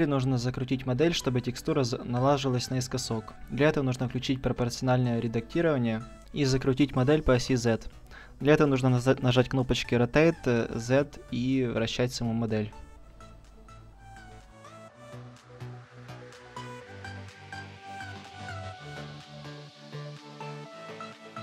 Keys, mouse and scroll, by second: 0.3-3.4 right drag, 2.6 r, 3.5-5.1 drag, 4.1 ctrl+z, 7.1 click, 9.3 r, 10.8-12.3 drag, 11.3 ctrl+z, 11.8 r, 12.7-14.3 middle drag, 13.1 r, 14.4-15.4 drag, 14.7 r, 16.2 click, 16.4 middle click, 16.8 right click, 17.0-18.4 middle drag, 18.5 a, 18.8 a, 20.2 ctrl+t, 20.9 a, 21.0 middle click, 21.2 middle click, 21.3 middle click.